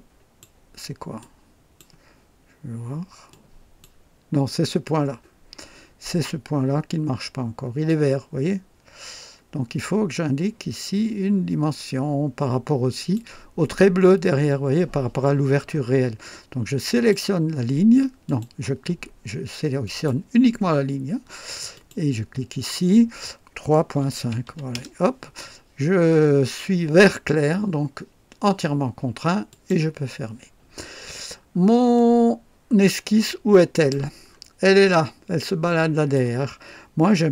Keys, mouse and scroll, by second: 1.2-2.0 drag, 3.3-4.0 drag, 7.8-13.3 drag, 16.9 click, 18.2 click, 19.8 click, 21.7 click, 23.9 KP_3, 24.2 KP_Decimal, 24.4 KP_5, 24.7 Return, 27.0-27.4 scroll down 1, 27.0-27.4 typing, 29.5 click, 30.8-31.6 scroll down 3, 31.9-34.1 drag, 34.2 scroll up 1, 34.9-36.3 drag, 36.0 typing.